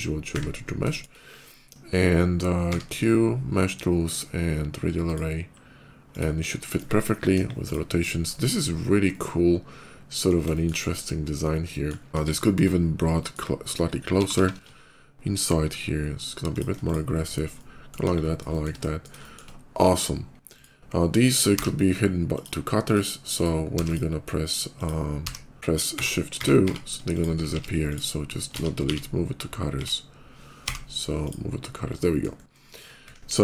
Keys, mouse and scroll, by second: 0.7 shift+middle click, 2.5 q, 4.9 ctrl+click, 6.0 ctrl+click, 6.2 ctrl+middle click, 7.2 KP_5, 7.5 click, 8.1 middle click, 8.8-10.1 middle drag, 10.3 middle click, 10.7 scroll up 1, 11.2 scroll down 1, 11.4 middle click, 12.0 scroll up 1, 12.1 KP_5, 12.3 middle click, 12.6 scroll up 1, 12.8 middle click, 14.0 g, 14.1 y, 16.4 shift+click, 16.6 shift+click, 16.9 shift+middle click, 17.1 shift+middle click, 17.3 shift+middle click, 17.8 KP_5, 18.3 middle click, 18.3 shift+KP_5, 18.6 middle click, 19.1 middle click, 19.6 middle click, 20.2 shift+click, 21.2 m, 22.0 click, 22.7 click, 23.2 click, 23.6 click, 24.6 click, 25.4 click, 25.8 shift+2, 26.2 shift+2, 26.7 shift+2, 27.0 click, 27.3 x, 27.7 click, 28.4 ctrl+z, 28.7 x, 28.9 ctrl+z, 30.5 m, 30.9 click, 31.8 middle click, 32.4 scroll up 1, 33.1 KP_5, 33.3 middle click, 33.3 scroll down 1.